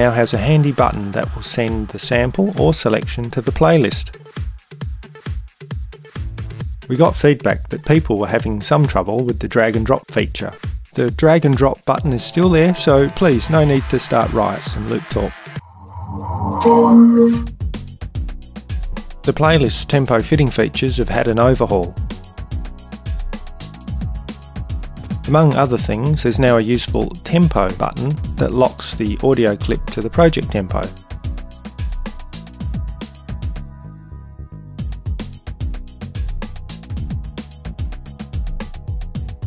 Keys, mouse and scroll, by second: 32.4 click.